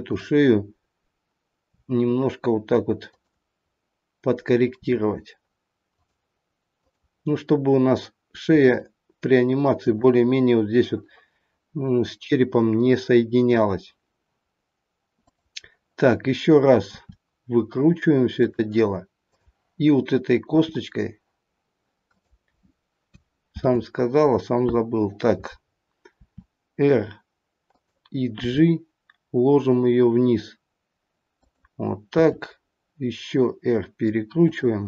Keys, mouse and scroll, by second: 1.6 r, 6.8 click, 8.5 r, 15.2 click, 16.8 r, 19.3 click, 20.6 r, 23.5 ctrl+z, 26.2 r, 28.4 g, 32.0 r.